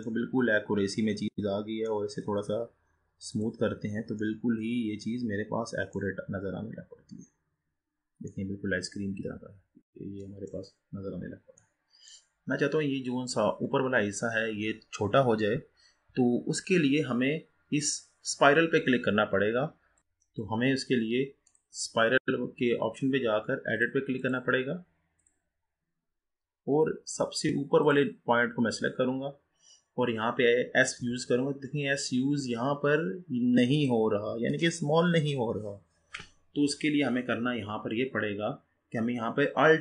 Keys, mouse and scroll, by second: 0.3-2.1 middle drag, 2.1-4.4 right drag, 4.4-6.4 middle drag, 6.4-7.1 scroll up 4, 7.1-7.8 scroll up 1, 7.8-8.4 scroll down 4, 8.4-10.8 middle drag, 10.8-11.7 scroll down 3, 11.7 middle click, 12.4-12.9 scroll up 2, 12.9-15.7 scroll up 4, 15.7-16.0 scroll up 1, 18.0 click, 20.0 ctrl+z, 20.1 click, 21.5 click, 23.8-26.6 drag, 26.6-27.9 scroll up 4, 27.9 click, 29.1-31.0 scroll down 1, 31.0 scroll down 3, 31.1 s.